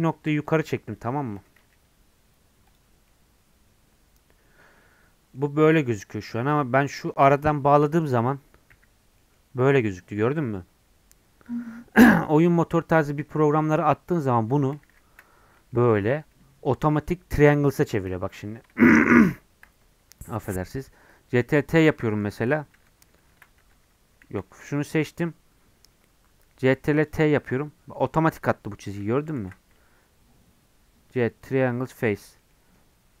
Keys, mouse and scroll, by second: 0.5 click, 1.1 shift+click, 1.5 g, 2.9 scroll down 1, 3.1-7.0 middle drag, 7.0 click, 8.7 j, 9.2 middle click, 9.7 click, 13.0-14.7 middle drag, 14.7 ctrl+z, 14.9 ctrl+z, 15.5 middle click, 15.9 Tab, 16.2 Tab, 16.5 3, 18.3 Tab, 18.5 Tab, 22.7 Tab, 24.3 a, 27.1 right click, 27.5-29.4 middle drag, 29.4 ctrl+z, 31.5 right click, 31.9-33.2 middle drag.